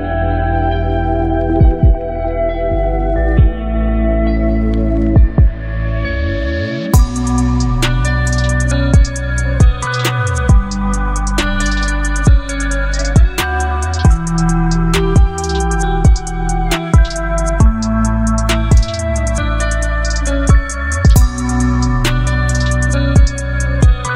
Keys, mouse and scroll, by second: 1.3 ctrl+0, 2.8 ctrl+t, 5.8-7.4 drag, 7.4-11.9 drag, 13.5 click, 20.1 ctrl+t, 23.6-24.1 drag.